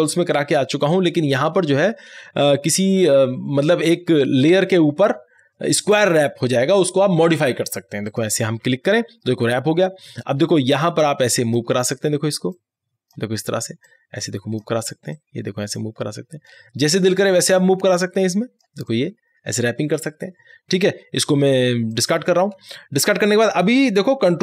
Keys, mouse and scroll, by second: 8.1 right click, 8.1 click, 10.6-22.0 drag.